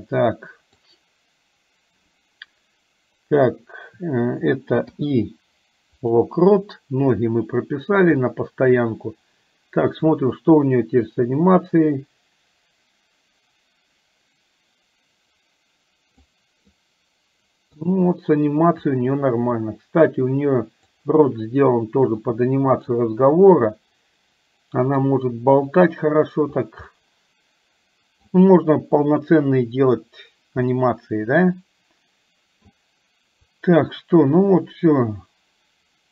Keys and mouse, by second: 8.3 shift+middle click, 10.4-16.4 drag, 16.8-17.8 middle drag, 19.2-21.3 drag, 22.3 middle click, 23.7-25.1 middle drag, 26.9-28.3 middle drag, 30.8-32.7 middle drag, 33.8-36.1 drag.